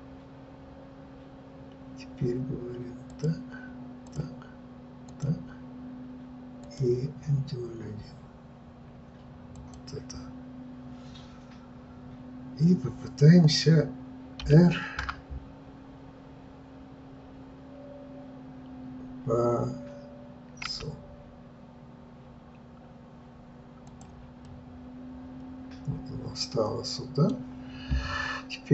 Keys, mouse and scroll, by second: 5.0-9.7 drag, 14.4 r, 24.5-28.7 middle drag.